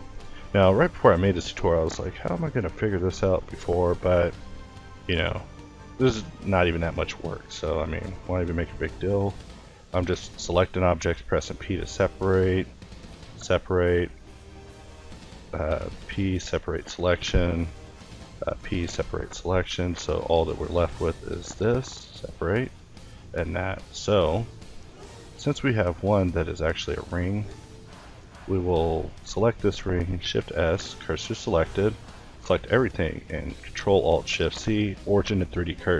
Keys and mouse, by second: 0.2 l, 1.5 p, 2.3 a, 2.8 a, 3.8-10.6 typing, 9.2 click, 11.9-15.2 typing, 14.4 click, 16.3-18.7 typing, 19.0 ctrl+i, 20.6 p, 22.0 a, 22.3 Tab, 23.0 a, 23.1 a, 23.7 a, 25.9 click, 26.2 Tab, 27.0 ctrl+t, 28.0-29.2 drag, 29.7 middle click, 30.7 Tab, 31.4 a, 31.7 a, 32.5 ctrl+a, 35.2 a.